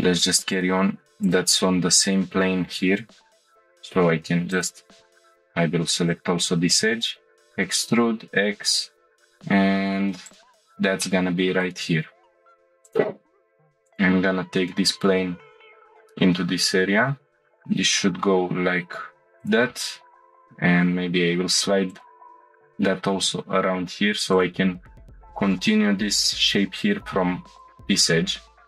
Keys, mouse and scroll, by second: 0.5 click, 1.2 shift+click, 3.8 e, 5.1 ctrl+z, 5.1 shift+click, 7.2 e, 7.8 x, 10.2 click, 11.0-11.7 shift+middle drag, 11.9 scroll up 1, 12.8 click, 12.8 1, 13.5 g, 13.9-15.3 drag, 17.5 g, 17.5 z, 19.4 click, 20.3 g, 20.5 g, 21.9-23.0 drag, 23.1 g, 23.3 z, 24.3 click, 27.4 2, 27.6-28.6 drag.